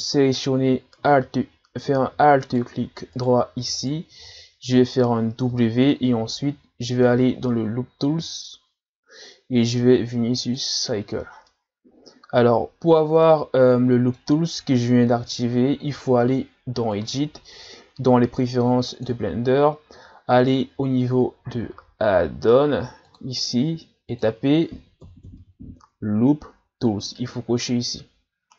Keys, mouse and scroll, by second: 2.5 alt+right click, 3.2 alt+right click, 3.7 alt+right click, 5.5 w, 8.1 w, 11.5-14.5 middle drag, 15.2 Tab, 16.9 click.